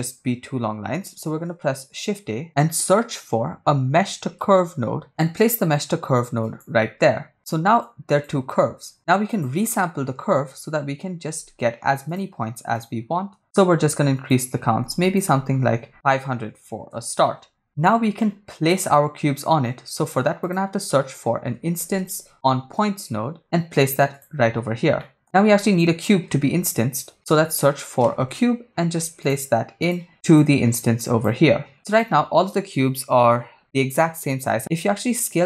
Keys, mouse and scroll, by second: 1.3 shift+a, 7.8 click, 8.8 shift+a, 13.4 shift+click, 15.0-16.9 drag, 16.7 0, 17.6 click, 18.2 middle click, 19.5 shift+a, 25.0 middle click, 26.5 shift+a, 30.3-31.3 drag, 31.7 click, 34.6 KP_0, 34.8-35.4 shift+drag.